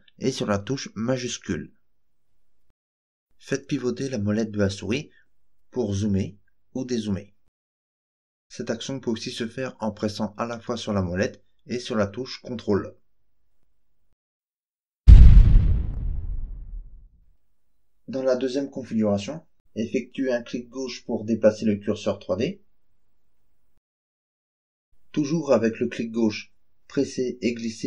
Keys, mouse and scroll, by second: 3.3-3.9 scroll up 4, 4.6-5.3 scroll down 4, 5.7-6.3 scroll up 4, 6.5-7.0 scroll down 4, 7.0 scroll up 1, 7.5 scroll down 1, 8.4-8.7 scroll up 1, 9.5-15.3 ctrl+middle drag, 18.2 click, 18.7 click, 19.1 click, 19.6 click, 20.3 click, 20.7 click, 21.1 click, 21.6 click, 22.1 click, 22.6 click, 23.1 click, 23.6 click, 24.1 click, 24.6 click, 26.1-27.8 drag.